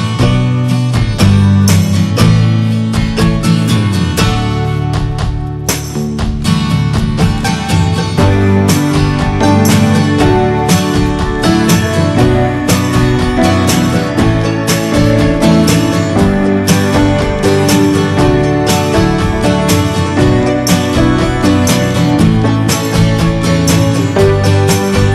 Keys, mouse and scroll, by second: 0.8 click, 1.5 ctrl+z, 6.3-8.9 drag, 9.3 scroll down 2, 9.5-15.8 middle drag, 15.8-19.2 drag, 19.2 middle click, 19.3-20.3 scroll up 1, 20.3 click, 20.6-22.5 shift+middle drag, 22.5 f, 23.2-24.2 middle drag, 24.2 click, 24.8 middle click.